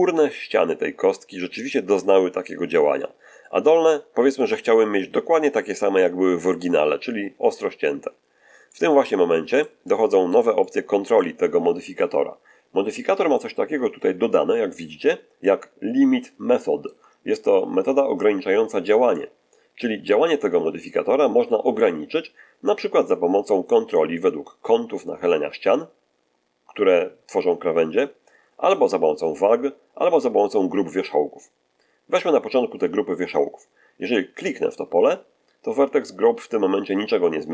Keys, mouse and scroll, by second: 3.5-4.5 middle drag, 8.6-9.7 middle drag, 10.5-11.3 middle drag, 15.5-17.0 ctrl+middle drag, 18.1 click, 34.3 click.